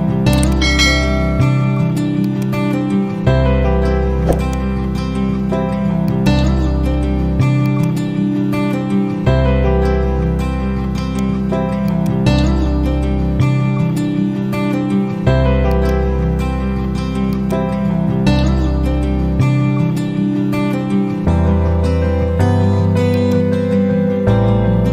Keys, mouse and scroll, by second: 0.0-0.8 typing, 0.3-1.5 drag, 2.5-3.4 click, 4.2 right click, 5.9-10.9 drag, 7.9-11.2 ctrl+click, 10.9 ctrl+right click, 11.8 shift+click, 15.6-16.9 drag, 20.5 Left, 23.1-24.6 drag.